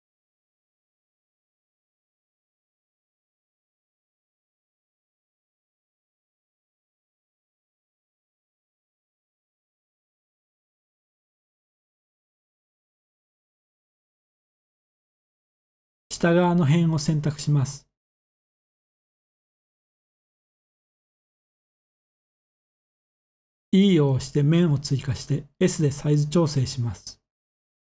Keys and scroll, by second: 3.1-3.4 typing, 4.8-5.2 typing, 11.2 z, 12.6 3, 17.8 s, 19.5 Escape, 20.3 z, 21.8 s, 23.2 Escape, 23.7-24.0 typing.